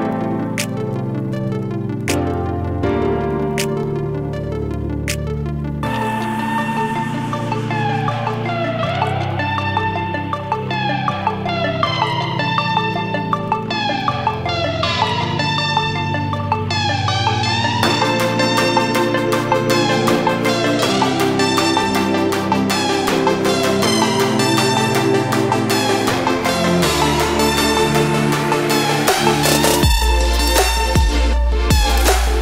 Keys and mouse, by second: 1.7 click, 5.6 typing, 6.3 click, 11.9 ctrl+j, 12.4-16.6 drag, 17.2 click, 20.3 click, 24.5 click, 26.6-27.1 typing, 30.2 click, 31.0-31.6 typing.